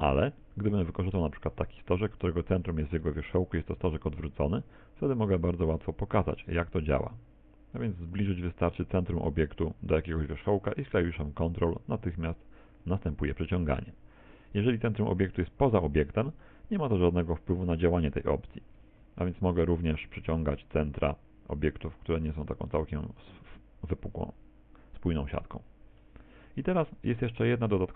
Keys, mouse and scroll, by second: 1.3 right click, 3.9 g, 15.3 right click, 16.5 middle click, 17.2 middle click, 18.5 g, 26.1 middle click, 26.9 middle click.